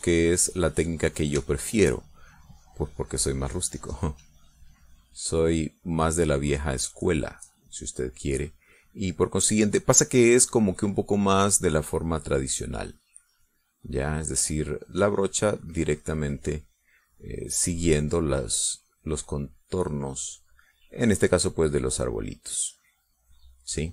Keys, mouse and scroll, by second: 2.1 shift+click, 3.4-8.2 drag, 8.3 middle click, 9.5-16.7 drag, 17.3-21.1 drag, 22.2-23.9 drag.